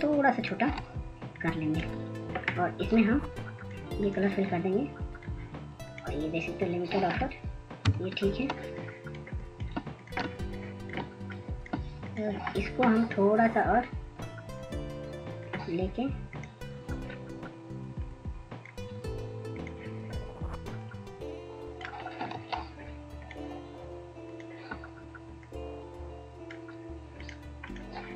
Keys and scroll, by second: 11.3 ctrl+0, 11.9-13.1 ctrl+0, 13.6 ctrl+space, 14.0 ctrl+space, 14.1 ctrl+space, 25.8 ctrl+z.